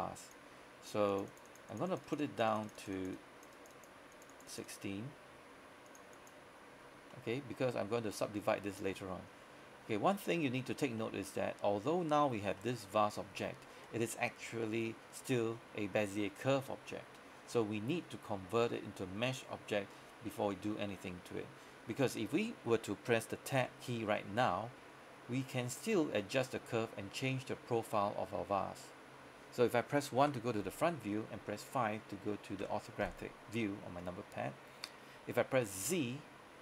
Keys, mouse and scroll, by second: 7.2 middle click, 8.0 scroll up 1, 8.2 middle click, 8.5 scroll down 1, 9.0 middle click, 10.4-11.1 scroll up 1, 11.1 middle click, 12.7 shift+middle click, 13.5 shift+middle click, 15.4-17.5 scroll up 1, 17.5 scroll down 1, 17.7 middle click, 18.2-18.7 scroll up 1, 18.7 middle click, 20.0-20.6 scroll down 1, 20.6 middle click, 23.6 Tab, 24.3 middle click, 25.1-25.4 scroll up 1, 25.4-25.8 scroll down 1, 25.8-29.9 scroll up 1, 29.9 middle click, 30.2 KP_1, 33.4 KP_5, 34.6-35.9 scroll up 1, 35.9 z.